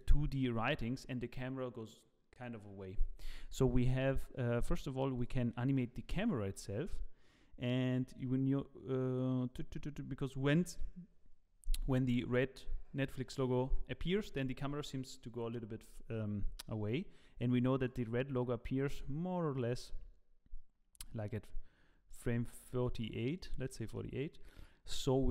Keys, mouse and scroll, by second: 5.1 click, 5.7 middle click, 6.2-6.9 scroll down 7, 6.5 middle click, 8.1 click, 16.9 click, 17.8 click, 21.0 click, 22.1 click, 23.3 click, 23.6 middle click.